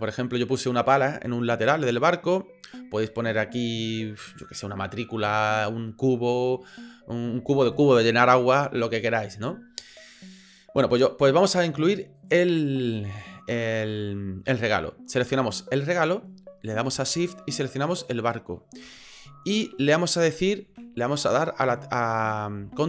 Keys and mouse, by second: 10.4 click, 12.2 right click, 15.7 right click, 18.1 shift+click.